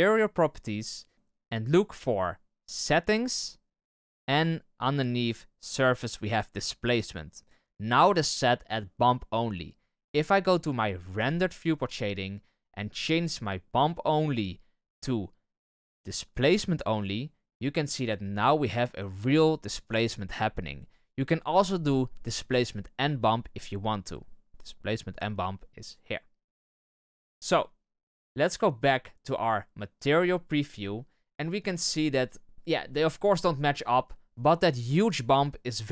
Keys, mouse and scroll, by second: 11.2 click, 16.9-28.2 drag, 30.1 click.